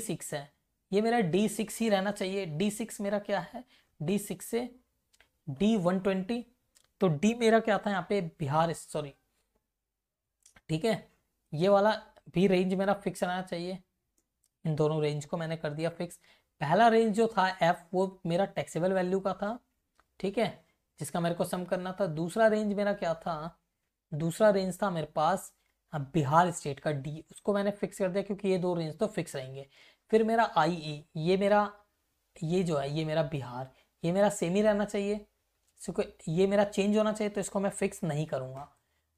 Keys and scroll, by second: 3.7 Left, 8.9 Left, 9.9 Right, 11.7 Left, 12.8 shift+Right, 16.1 F4, 16.1 Left, 21.1 Right, 25.7 Right, 38.5 Right.